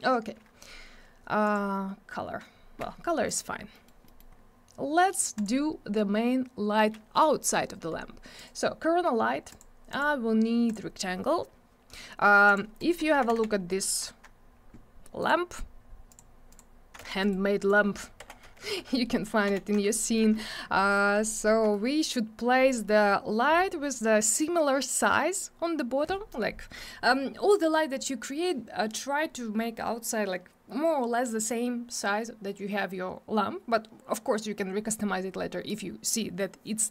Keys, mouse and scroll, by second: 1.4 click, 3.2 click, 3.7 middle click, 4.0 middle click, 4.3 scroll down 1, 5.3 click, 8.3 click, 9.5 click, 9.9 click, 10.0 double click, 10.6 click, 12.4 click, 12.7 right click, 13.0 z, 13.3 alt+w, 13.4 scroll down 1, 13.6 middle click, 15.2 click, 16.0 click, 16.5 click, 17.0 alt+w, 17.2 right click, 18.2 p, 18.9 alt+middle click, 19.4 F3, 19.9 alt+middle click, 20.7 middle click, 21.0 scroll down 1, 21.2 alt+middle click, 21.3 alt+double middle click, 21.7 alt+middle click.